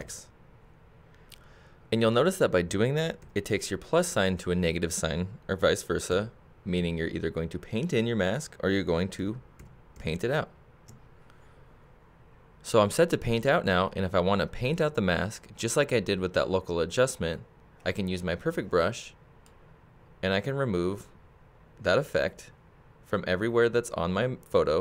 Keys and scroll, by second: 0.0 shift+x, 3.2 shift+x, 6.1 shift+x, 9.2 shift+x.